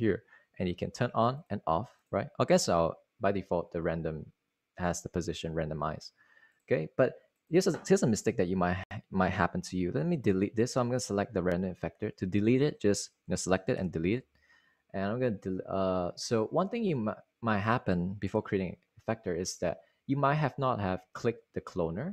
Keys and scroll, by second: 14.4 d, 19.0 d.